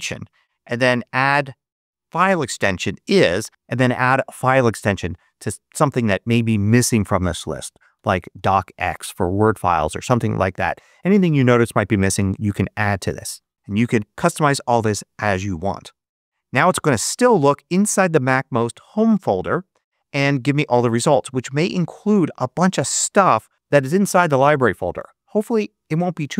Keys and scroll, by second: 0.0-0.1 typing, 7.4-8.7 typing.